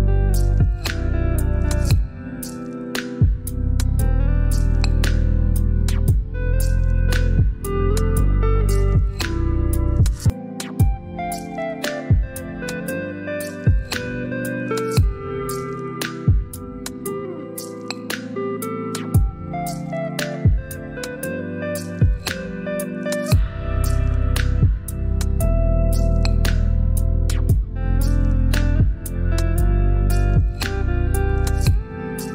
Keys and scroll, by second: 0.9 shift+Down, 2.3 Up, 2.6 Up, 4.8 i, 7.4 typing, 8.1 ctrl+BackSpace, 10.8 ctrl+j, 13.0 shift+Down, 14.2 Up, 14.4 Up, 16.9 i, 20.0 typing, 21.0 ctrl+BackSpace, 23.1 shift+Up, 23.7 Up, 25.4 ctrl+j, 26.3 shift+Down, 28.3 Down, 28.5 Down.